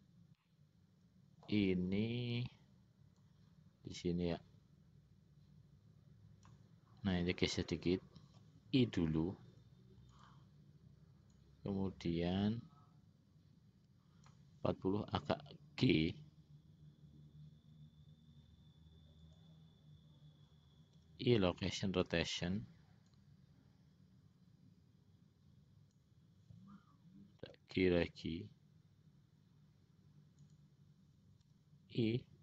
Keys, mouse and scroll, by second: 0.5-1.7 middle drag, 3.5-6.9 drag, 11.6-14.7 drag, 16.2 g, 23.4-26.5 drag, 28.3 g, 31.6 i.